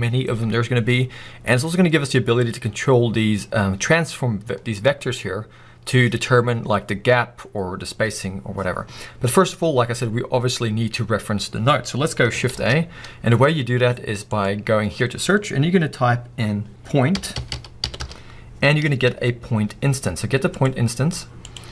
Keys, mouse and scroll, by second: 4.5-21.1 drag.